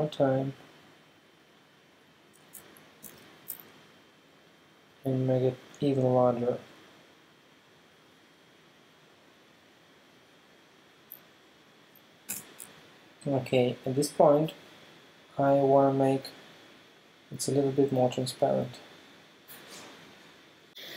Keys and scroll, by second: 3.0 super+t, 12.3 Return.